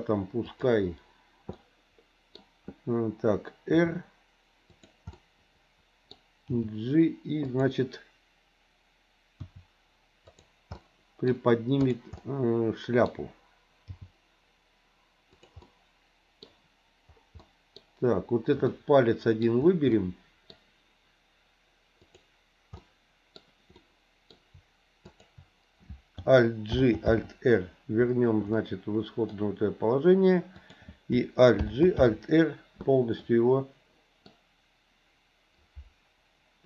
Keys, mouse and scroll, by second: 0.4 click, 1.5 middle click, 3.7 r, 5.1-6.1 middle drag, 6.5 g, 9.4 r, 10.8 middle click, 11.8 click, 12.1 middle click, 13.8 g, 15.6-16.7 middle drag, 17.5 middle click, 18.7 scroll up 1, 18.9 middle click, 20.1 middle click, 22.0 click, 22.8 middle click, 23.7 middle click, 25.0 shift+click, 26.8 alt+g, 27.1 alt+r, 28.6 middle click, 30.5 click, 31.6 alt+g, 32.0 alt+r, 33.2-34.3 middle drag.